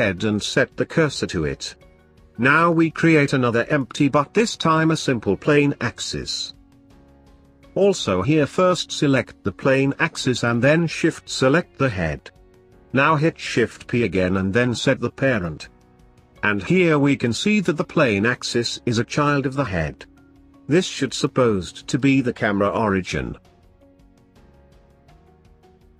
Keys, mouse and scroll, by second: 3.4-6.5 drag, 9.6 shift+click, 11.3 ctrl+p, 13.9-16.1 drag, 16.7-20.0 drag, 21.7 g, 23.4 click, 23.7 g, 25.5 click, 25.7 g.